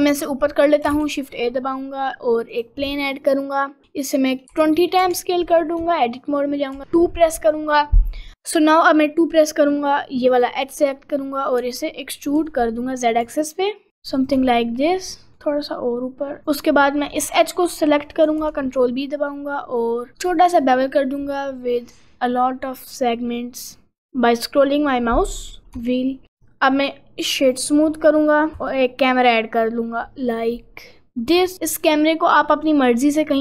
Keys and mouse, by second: 0.6 middle click, 1.0 shift+a, 3.1 middle click, 3.8 s, 5.8 Tab, 6.8 2, 7.3 click, 11.6 e, 15.3 g, 16.4 click, 17.1 middle click, 18.0 middle click, 18.4 ctrl+b, 25.8 Tab, 26.4-28.0 right drag, 28.6 shift+a, 31.9 middle click, 32.4 middle click, 33.0 middle click.